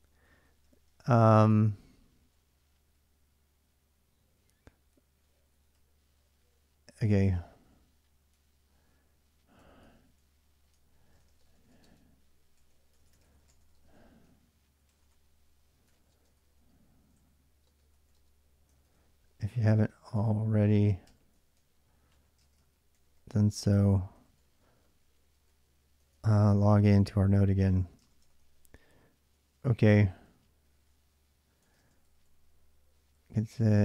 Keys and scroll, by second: 0.0-0.7 typing, 1.7-2.7 typing, 4.5-26.0 typing, 25.9 ctrl+[, 26.8 ctrl+[, 26.9 ctrl+j, 27.6-33.1 typing, 31.5 ctrl+[.